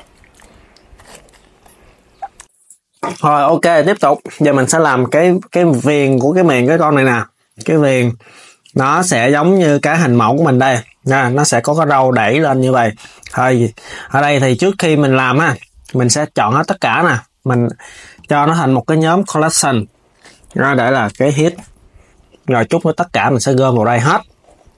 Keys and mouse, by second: 4.1 s, 5.0 KP_3, 13.4 click, 15.5 a, 23.4 click, 23.9 s.